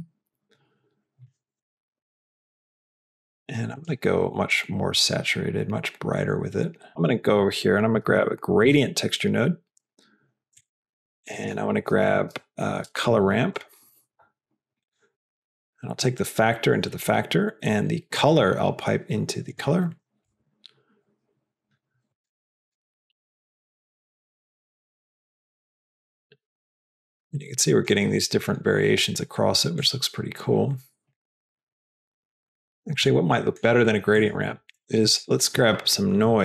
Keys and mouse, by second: 1.5 click, 3.4 click, 6.9 shift+a, 11.1 shift+a, 15.1 click, 16.0-16.7 drag, 16.9 click, 18.2-19.9 drag, 22.7 click, 23.4 middle click, 23.6-28.2 drag, 29.8 click, 31.8-33.2 drag, 33.4 middle click, 34.0 click, 34.7 x, 35.2 shift+a.